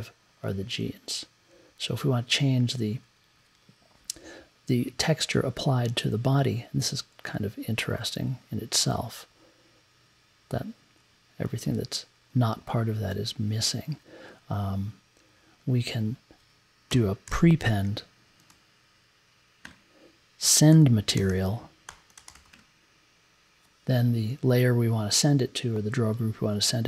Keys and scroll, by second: 0.8 Down, 1.5 Down, 2.4 Down, 16.9 n, 17.2 p, 18.5 e, 19.6-23.0 typing.